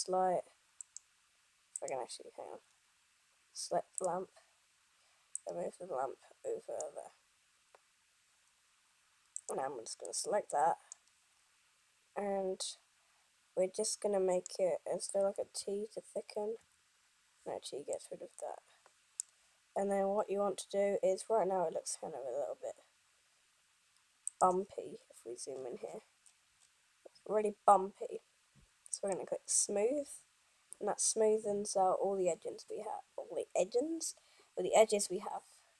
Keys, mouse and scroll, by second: 2.1 click, 2.9 scroll down 1, 4.2 click, 5.6 click, 9.6 right click, 10.2 middle click, 11.2-12.8 scroll down 1, 12.8 middle click, 16.6 t, 18.1 middle click, 20.3 scroll down 1, 23.9 scroll up 5, 24.5 click, 25.3 scroll up 1, 26.0 scroll up 3, 26.1 scroll down 1, 27.7 scroll up 1, 29.1 click.